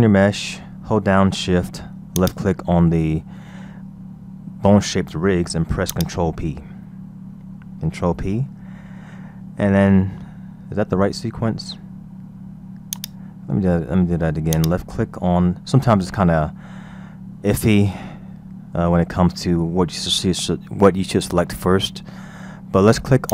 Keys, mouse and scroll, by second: 2.2 shift+click, 5.9 click, 7.9 ctrl+p, 12.9 click, 14.6 click.